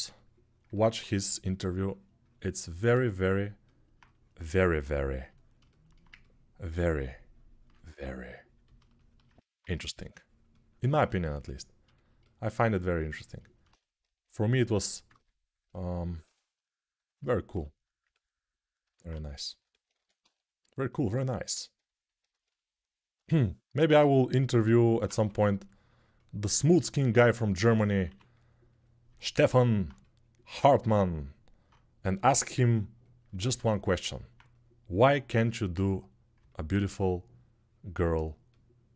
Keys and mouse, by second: 14.8 ctrl+alt+click, 15.1 alt+click, 16.0 g, 18.1 alt+middle click, 18.5 alt+shift+click, 19.3-22.7 alt+drag, 19.7 1, 24.9 2, 26.8 1, 27.3 1, 29.6-38.9 shift+drag, 36.6 3.